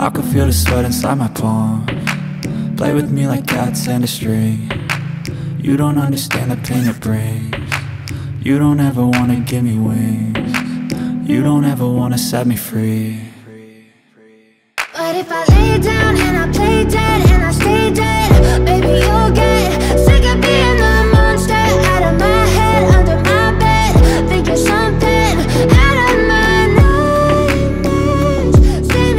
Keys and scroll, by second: 2.0 c, 2.2 e, 5.8 F2, 7.9 F4, 8.7 Escape, 9.9 F2, 11.7 F3, 12.8 F2, 14.3 space, 15.4 F3, 17.5 ctrl+g, 18.3 c, 18.9 shift+F2, 20.0 shift+Page_Up, 27.3 F2, 28.9 Escape.